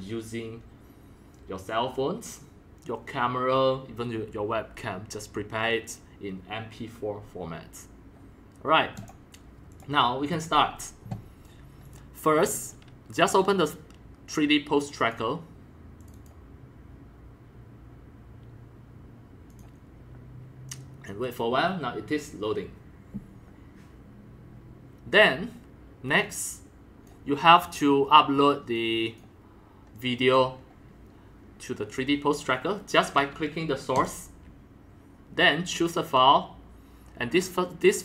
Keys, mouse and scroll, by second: 3.5 click, 9.0 click, 9.7 click, 11.8 click, 12.5 click, 13.2 click, 13.4 click, 15.0 click, 16.0 click, 16.1 click, 19.5 click, 20.8-24.7 drag, 26.2 click, 28.8 click, 29.9-31.9 drag, 32.2 drag, 34.0-38.0 drag.